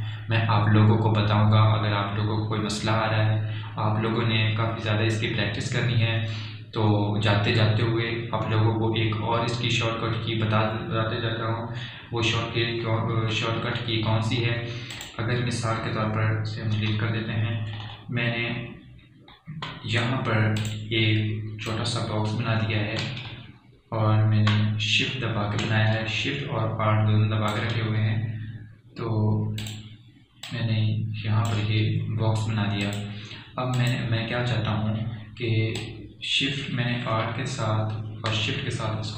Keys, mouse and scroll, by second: 15.1 alt+scroll down 1, 15.9 alt+scroll up 1, 16.4 click, 16.5 click, 18.3 Delete, 19.3-19.9 alt+scroll down 1, 20.0 alt+scroll up 1, 22.1 click, 22.1-39.1 drag.